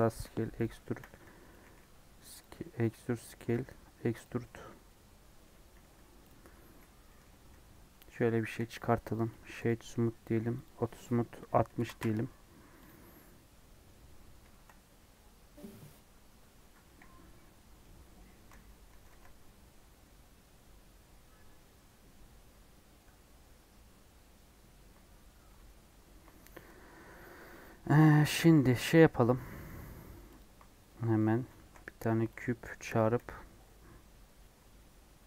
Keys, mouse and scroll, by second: 0.7 shift+middle click, 1.0 e, 2.5 middle click, 3.4 e, 4.3-5.7 middle drag, 5.7 s, 6.8 scroll down 3, 7.1 middle click, 7.5 Tab, 8.5 KP_1, 9.6 right click, 10.5-13.0 drag, 13.0 scroll down 1, 13.1 middle click, 13.8-14.4 scroll up 4, 14.5-32.4 shift+middle drag, 32.4 shift+a, 33.1 KP_1, 34.0 scroll down 1.